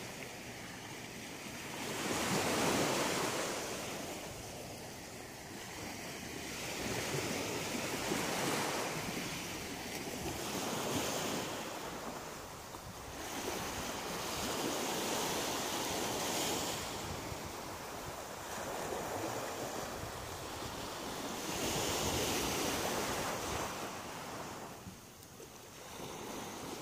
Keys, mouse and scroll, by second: 0.7 middle click, 1.9-2.8 scroll down 8, 3.1 middle click, 5.3-6.3 scroll up 9, 6.3 shift+middle click, 7.2 middle click, 8.0 shift+right click, 9.3 shift+right click, 10.0 middle click, 11.7 g, 12.9 click, 13.1 middle click, 15.5 shift+middle click, 16.4-17.0 scroll down 2, 17.5 shift+right click, 17.8 shift+right click, 17.9 shift+right click, 18.1 shift+right click, 18.1 shift+right click, 18.5 shift+right click, 18.9 shift+right click, 19.3 shift+right click, 19.7 shift+middle click, 20.6 shift+right click, 21.7 click, 22.9 shift+middle click, 23.5 middle click, 26.4 middle click.